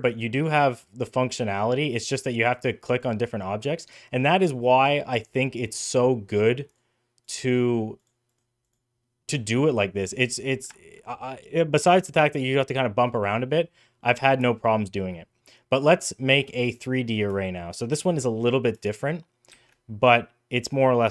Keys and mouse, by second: 0.3 click, 1.2-2.8 drag, 5.5-6.5 drag, 7.1 click, 7.8 click, 8.1 click, 8.5 click, 9.2 middle click, 10.6-11.1 shift+middle drag, 12.9 middle click, 13.8 middle click, 14.4 shift+middle click, 19.4 shift+a.